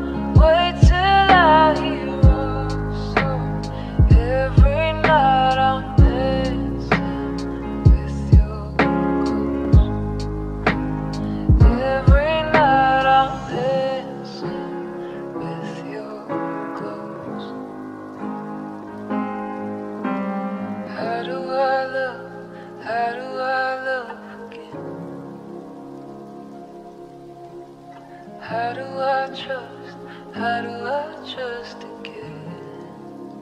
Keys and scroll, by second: 13.5 space, 21.1 ctrl+z.